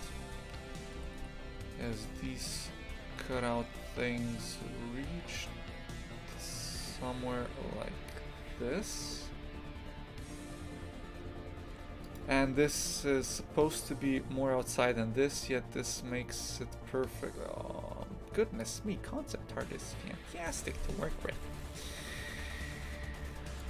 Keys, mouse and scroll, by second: 1.0 g.